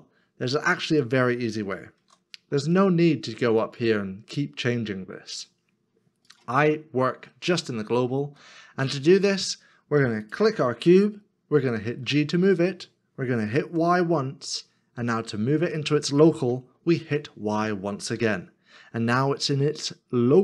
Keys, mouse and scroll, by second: 2.0 ctrl+z, 7.3 middle click, 12.1 g, 13.8 y, 18.1 y.